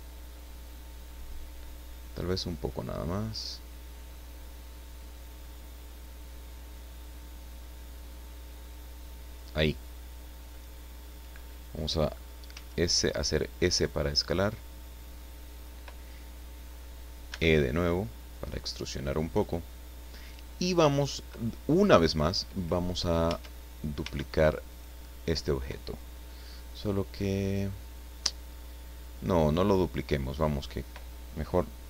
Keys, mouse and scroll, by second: 9.3 click, 10.2 scroll down 2, 10.5 middle click, 11.4 scroll up 2, 11.5 middle click, 12.5 s, 15.5 click, 17.3 e, 19.3 click, 19.8 scroll down 2, 23.7 Tab, 24.0 Tab, 24.6 right click, 27.4 right click, 29.1-29.5 scroll up 1, 29.8 scroll up 1, 29.8-30.2 scroll down 1.